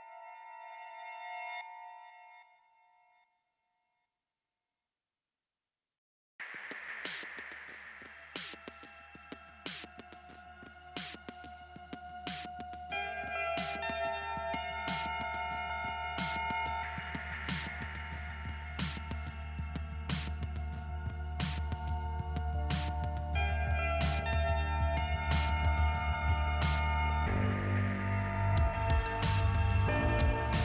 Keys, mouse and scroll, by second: 0.5 click, 2.2-3.3 scroll up 2, 4.2 click, 9.8 click, 10.1 click, 11.9 click, 13.1 click, 13.2 click, 14.9 click, 16.1 click, 17.8 click, 18.6 scroll up 2, 20.6 click, 24.4 click, 24.9 double click, 25.4 double click, 26.0 click, 28.9 click, 29.0 click, 29.4-30.4 scroll down 2, 30.4 p.